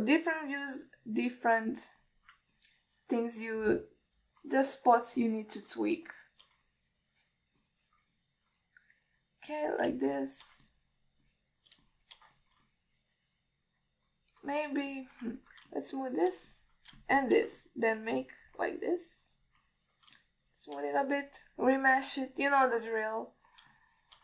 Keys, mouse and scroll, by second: 0.4-0.9 middle drag, 1.4 click, 2.7-3.5 drag, 3.8-4.6 middle drag, 5.2-5.7 middle drag, 6.0 shift+middle drag, 6.5-6.9 alt+middle drag, 7.4-7.7 shift+drag, 7.9-8.6 middle drag, 8.9 click, 9.4-10.5 middle drag, 10.8 click, 11.2-11.7 shift+drag, 11.9 middle drag, 12.5 click, 13.1 shift+click, 13.6 ctrl+alt+middle click, 13.9-15.3 middle drag, 15.8 alt+middle drag, 16.2 ctrl+alt+middle drag, 16.6 middle click, 17.0 shift+click, 17.8 alt+middle drag, 18.2 shift+click, 18.9 alt+middle click, 19.2 click, 19.9 middle click, 20.9 middle click, 21.4 shift+click, 22.4-23.4 drag, 23.5-24.2 alt+middle drag.